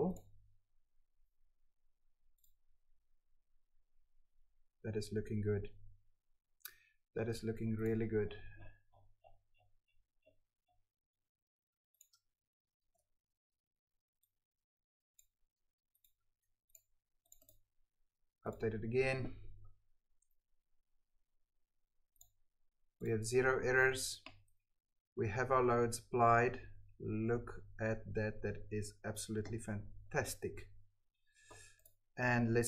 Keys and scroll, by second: 12.8 ctrl+c, 16.2 ctrl+v.